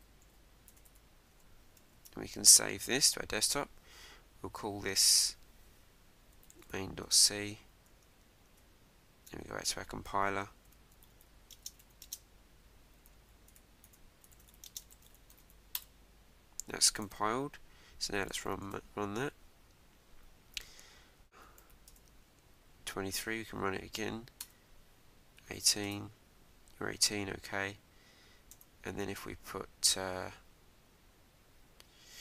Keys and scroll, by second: 1.3 Return, 1.9 super+s, 7.0 Return, 8.4 super+Tab, 15.8 Return, 18.7 Return, 21.9 Return, 23.5 Up, 24.4 Return, 27.3 Up, 28.5 Return.